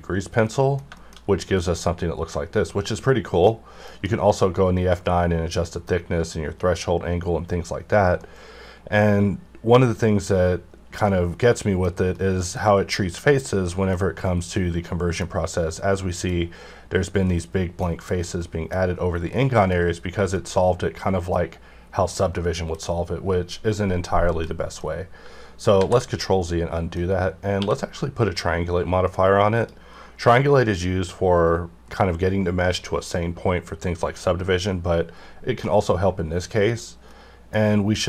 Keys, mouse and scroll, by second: 0.4 middle click, 1.2-1.5 scroll up 1, 1.5-3.9 middle drag, 3.8 F9, 8.2 middle click, 9.0 scroll up 1, 11.1 middle click, 12.1 middle click, 13.4 scroll down 1, 13.7-15.9 middle drag, 16.1 scroll down 1, 17.4-20.0 middle drag, 20.0 scroll up 1, 20.3-21.7 middle drag, 21.7-22.1 scroll down 1, 22.1-25.7 middle drag, 25.7 ctrl+z, 26.4 middle click, 27.5 q, 29.5 click, 36.6 click, 37.1-38.0 middle drag.